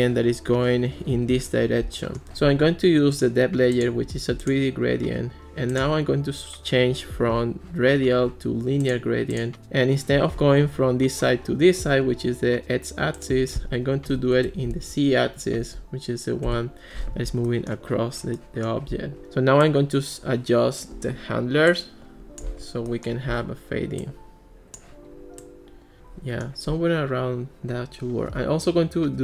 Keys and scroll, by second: 14.1 o, 14.4 Return, 15.6 1, 16.5 Return.